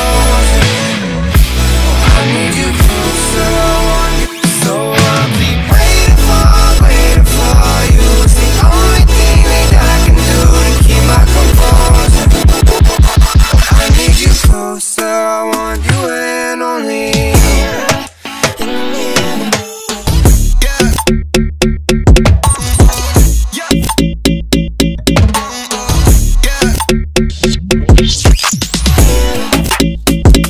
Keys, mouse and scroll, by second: 2.9 alt+scroll up 1, 3.8 b, 4.4 click, 4.5-7.9 drag, 8.1-8.5 scroll down 2, 8.5-13.2 drag, 13.2 v, 13.4-13.8 alt+scroll down 2, 14.2 alt+scroll up 1, 14.8 e, 15.1 click, 15.8 v, 16.2 b, 16.6 click, 18.5 v, 18.8 alt+scroll down 1, 19.6 scroll up 1, 20.0 alt+scroll down 1, 20.6 alt+scroll down 1, 21.0 alt+scroll up 1, 22.1 click, 22.5 ctrl+t, 23.2-24.5 drag, 24.5 Return, 25.3 alt+Num_Lock, 25.3-26.5 alt+scroll down 4, 26.5 click, 29.0-30.4 drag.